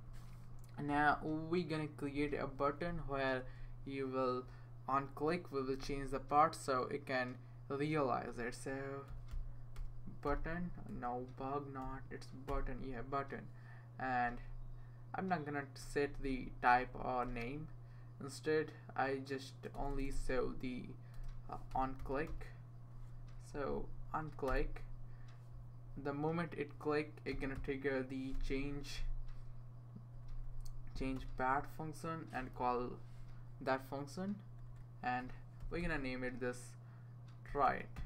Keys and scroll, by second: 2.9 Return, 3.5 Return, 9.1-12.3 typing, 12.5 Return, 14.3 Right, 14.5 Right, 15.0 Right, 15.2 Right, 15.3 Right, 15.4-21.5 Right, 18.6-19.0 BackSpace, 21.1-24.1 typing, 23.9 Down, 27.3-28.8 typing, 30.3 Down, 30.4 Down, 30.6 Down, 31.1 Return, 32.4-32.8 typing, 34.5 Right, 35.3-38.0 typing.